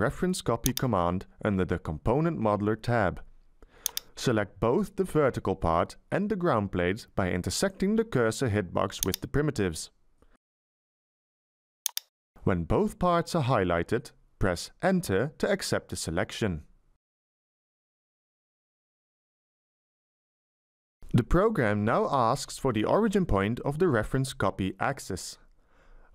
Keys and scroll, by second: 15.4 Return, 20.8 Tab, 22.1 Tab, 23.4 Tab.